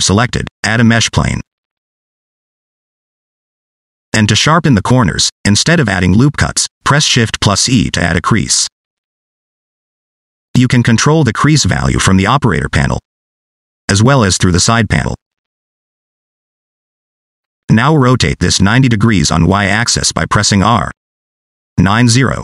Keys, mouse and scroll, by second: 0.8 shift+a, 4.2 middle click, 6.1 shift+e, 12.0 click, 12.8 click, 15.1 click, 16.8 click, 21.0 r.